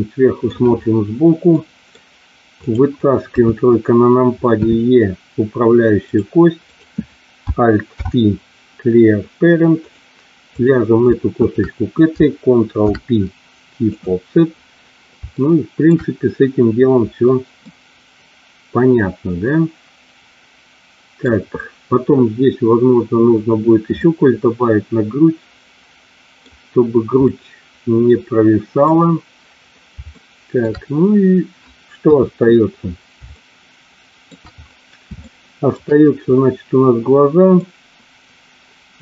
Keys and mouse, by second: 1.4 middle click, 2.6 click, 3.2 KP_3, 4.6 e, 6.6 click, 7.9 alt+p, 10.4 click, 11.3 shift+click, 12.7 ctrl+p, 15.3 shift+middle click, 17.6-21.2 middle drag, 24.0-26.5 middle drag, 27.2-28.8 middle drag, 30.2 shift+middle click, 32.0 KP_3, 33.3-34.3 shift+middle drag, 35.2 shift+middle click, 37.5-39.0 middle drag.